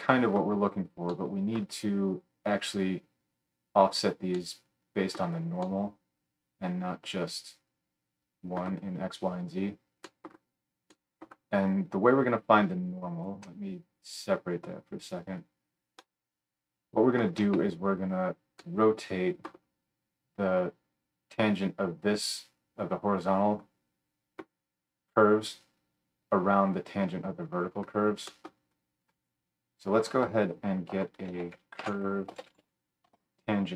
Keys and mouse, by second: 13.0-29.2 ctrl+middle drag, 13.0 ctrl+right click, 29.2-33.7 drag, 30.2 F3.